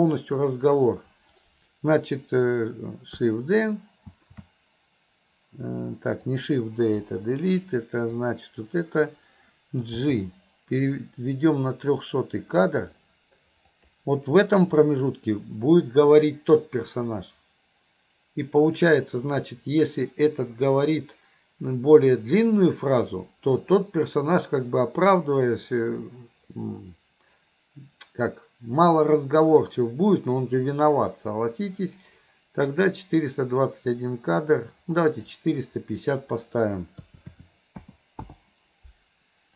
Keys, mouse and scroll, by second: 8.1-9.1 drag, 32.1 click, 35.2 click, 36.0-38.4 drag.